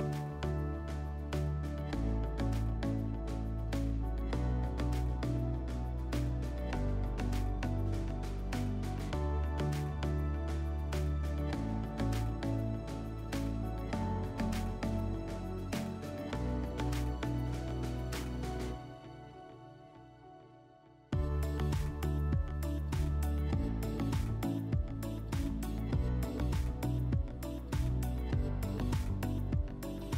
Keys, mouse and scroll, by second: 0.6 click, 2.0 click, 2.3-3.1 middle drag, 3.2 drag, 3.5 scroll, 5.3-6.9 drag, 8.4 alt+middle click, 11.3 click, 12.3-12.8 drag, 13.5-15.0 drag, 15.2-16.9 drag, 18.5-20.1 drag, 20.5-21.6 drag, 22.0 click, 22.8-24.3 drag.